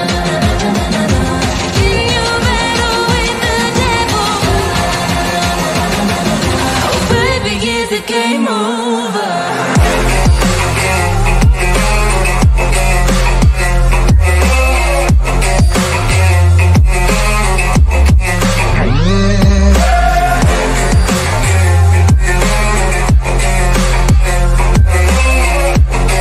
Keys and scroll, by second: 3.6 F3, 4.1 Escape, 4.5 Delete, 4.7 Escape, 17.8 Escape, 19.6 Delete, 20.8 Escape.